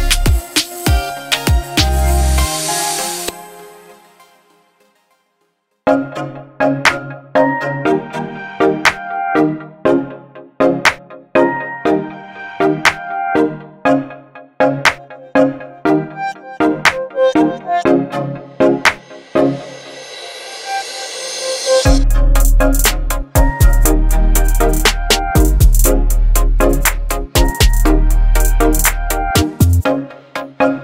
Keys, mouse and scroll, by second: 3.0 Up, 5.2 Down, 5.5 Up, 6.9 click, 7.1 Up, 7.1 click, 7.2 click, 8.9-10.6 alt+drag, 9.7 alt+click, 12.6 t, 13.4 r, 14.7 shift+r, 16.2 u, 17.3-18.4 typing, 21.7 click, 23.8-24.5 drag, 27.5 ctrl+t, 29.3-30.8 alt+drag.